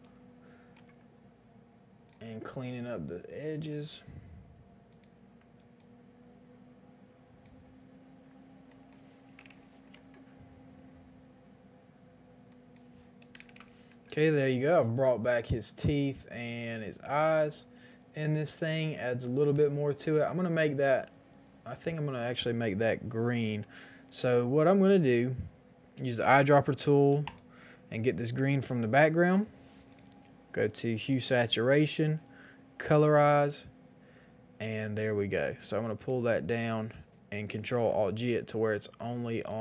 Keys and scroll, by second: 9.4 Return, 9.4 KP_1, 9.4 KP_0, 13.3 KP_0, 13.4 KP_0, 13.5 Return, 14.1 space, 37.3 ctrl+alt+g.